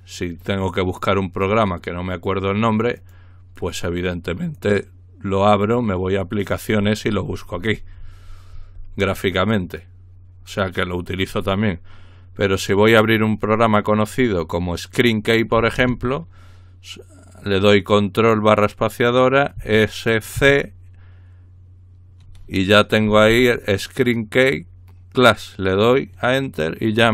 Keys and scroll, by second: 19.6-20.4 typing, 23.2 Down, 23.3 Down.